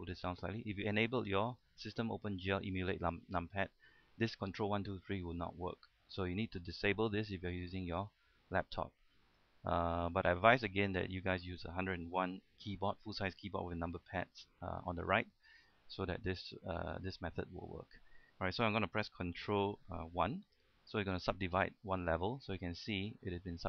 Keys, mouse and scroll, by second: 12.8-18.7 middle drag, 20.9 ctrl+1, 21.4 middle click, 22.3-22.7 scroll up 1, 22.7-23.6 middle drag.